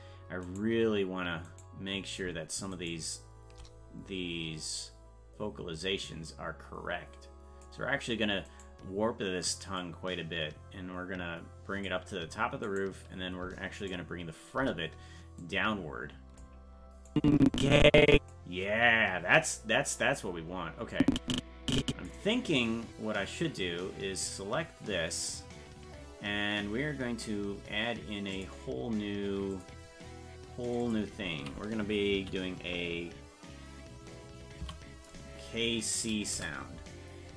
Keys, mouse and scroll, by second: 0.7 right click, 1.8 right click, 3.1 shift+right click, 4.6-7.7 drag, 8.8 right click, 9.8-11.9 drag, 12.9 right click, 14.1 shift+right click, 15.4-16.4 drag, 17.1-18.3 drag, 21.0-22.1 drag, 24.2 click, 28.4-29.7 drag, 30.7 click, 30.8-36.9 drag.